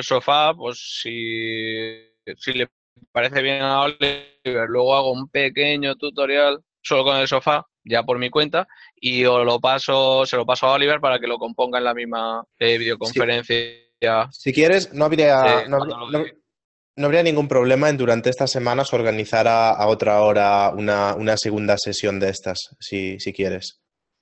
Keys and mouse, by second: 1.6 alt+click, 4.6 alt+click, 7.8 click, 10.8 click, 21.9 click.